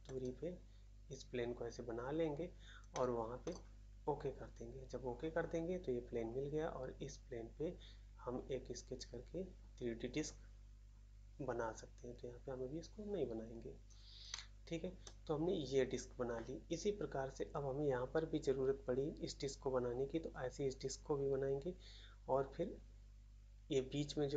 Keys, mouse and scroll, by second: 0.0 middle click, 2.9 middle click, 3.4 middle click, 13.9 scroll up 1, 14.2 middle click, 15.0 middle click.